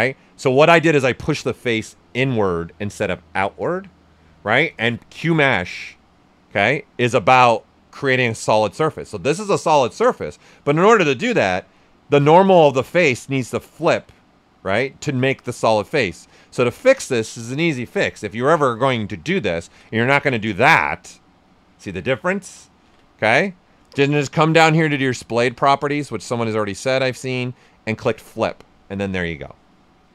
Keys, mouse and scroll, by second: 6.5-10.6 right drag, 10.6 ctrl+z, 11.8-13.5 drag, 13.5-16.4 right drag, 16.4 click, 19.5 click, 19.6 ctrl+z, 20.0 click, 20.7-22.8 right drag, 22.8 ctrl+z, 23.3-25.2 drag, 25.2 shift+click, 27.9 click.